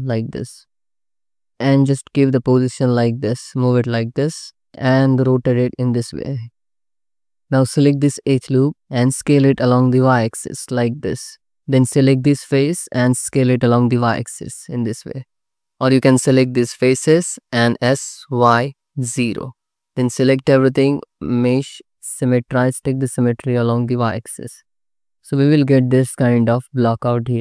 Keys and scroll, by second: 5.2 r, 8.3 s, 9.1 y, 12.4 s, 13.1 y, 17.4 s, 18.1 y, 18.7 0, 19.9 a, 24.1 alt+z.